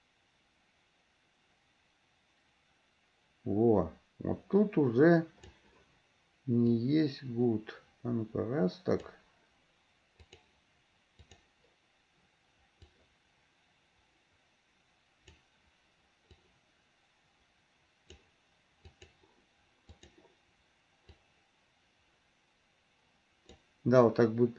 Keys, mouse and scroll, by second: 6.8-9.3 drag, 10.4 click, 11.4 click, 12.9-15.6 drag, 16.6-18.3 drag, 19.1 click, 20.1 click, 21.4-23.6 drag.